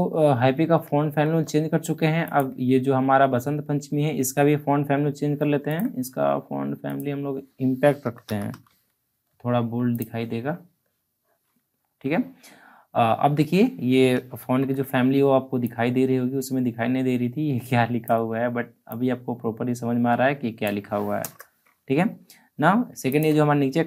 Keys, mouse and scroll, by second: 0.9 alt+scroll up 1, 1.9-2.2 scroll up 1, 2.2 ctrl+click, 5.5 ctrl+Num_Lock, 5.5 ctrl+click, 5.6 ctrl+click, 7.7-9.1 typing, 9.8 click, 9.9 click, 14.0 ctrl+Num_Lock, 14.0 click, 14.3 ctrl+t, 15.6-21.2 drag, 21.2 Return, 23.0 ctrl+click.